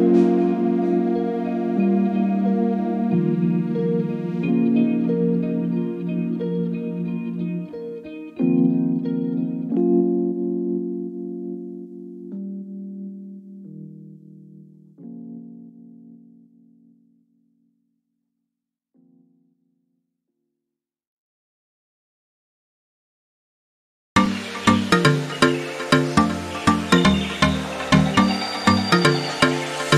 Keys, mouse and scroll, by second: 0.7-2.1 ctrl+shift+drag, 3.0 click, 4.8-6.6 ctrl+shift+drag, 7.0-8.1 ctrl+shift+drag, 8.3-9.2 ctrl+drag, 9.7 ctrl+click, 10.6 click, 13.2 ctrl+d, 13.5-14.9 ctrl+drag, 15.0 ctrl+d, 15.2-16.8 ctrl+drag, 17.9 ctrl+d, 18.1-20.6 ctrl+drag, 21.5 shift+click, 22.0 shift+click, 22.5 shift+click, 23.1-26.0 ctrl+shift+drag, 26.3-27.4 ctrl+drag, 27.7 ctrl+click, 28.9 ctrl+d.